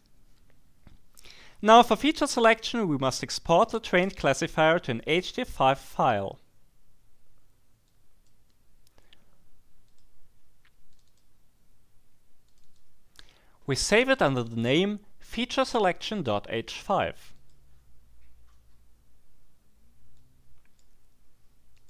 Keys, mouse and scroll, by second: 7.8 click, 9.8 click, 10.9 click, 12.4 click, 17.3 click, 20.2-21.2 drag, 21.7 click.